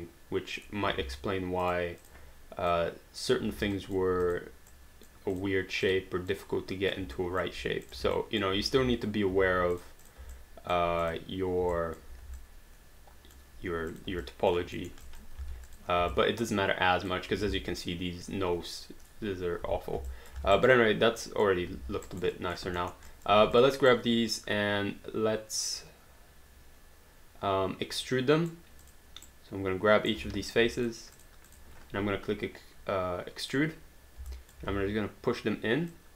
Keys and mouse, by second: 1.0 ctrl+z, 1.6 click, 3.8 alt+click, 4.3 click, 7.2 alt+click, 7.8 click, 8.2 alt+click, 8.8 w, 9.8 click, 10.5 alt+click, 11.0 click, 11.8 alt+click, 12.4 alt+click, 14.0 click, 14.2 alt+click, 14.9 alt+middle click, 15.0 alt+click, 15.4 alt+d, 15.7 click, 16.2 alt+click, 19.7 3, 20.2 alt+click, 20.4 alt+d, 20.6 alt+right click, 20.7 alt+click, 22.1 alt+right click, 22.3 alt+click, 22.8 alt+middle click, 23.1 alt+click, 23.6 click, 23.9 right click, 28.9 click, 29.2 right click, 30.2 q, 30.5 click, 30.8 shift+click, 33.4 click, 34.3 alt+click, 34.7 w, 35.9 click.